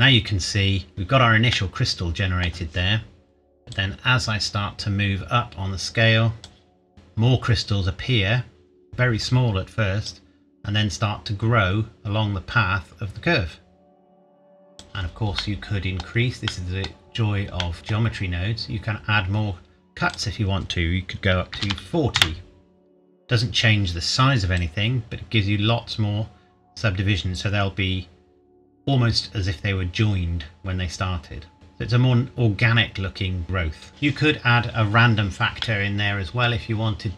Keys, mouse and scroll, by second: 1.5 middle click, 2.4 scroll up 1, 3.7 click, 7.9-9.2 scroll up 1, 10.1 click, 15.4 middle click, 16.0-16.5 scroll down 1, 16.5 middle click, 17.1-17.6 scroll up 1, 17.6 middle click, 18.3-20.0 scroll up 1, 20.1 click, 21.5 KP_4, 21.6 KP_0, 22.2 KP_Enter, 23.5-24.5 scroll down 1, 24.5 click, 33.9 middle click, 35.1-35.6 scroll down 1, 35.6 middle click.